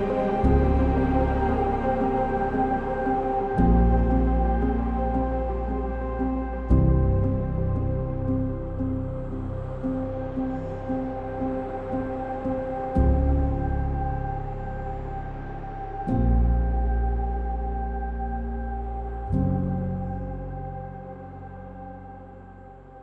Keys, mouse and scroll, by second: 1.5 e, 3.3 e, 7.4 e, 8.1 click, 22.1 ctrl+z.